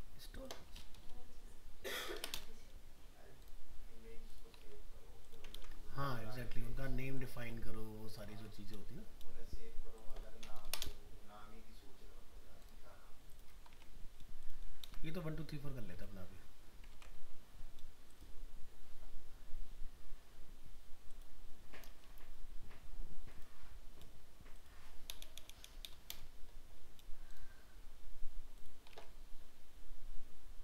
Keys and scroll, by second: 4.6 alt+Tab, 5.5 ctrl+v, 7.4 alt+Tab, 8.3 ctrl+Tab, 13.7 alt+Tab, 14.8 ctrl+v, 15.9 alt+Tab, 29.0 alt+Tab.